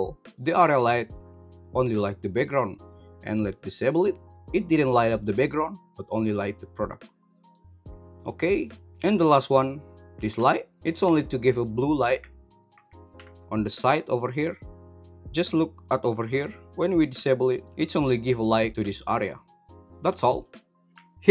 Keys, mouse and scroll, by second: 0.3 click, 0.7 g, 2.7 right click, 3.9 click, 6.1 g, 11.0 g, 11.4 right click, 11.8 click, 12.5 click, 13.1 h, 15.3 ctrl+z, 17.1 h, 17.6 ctrl+z.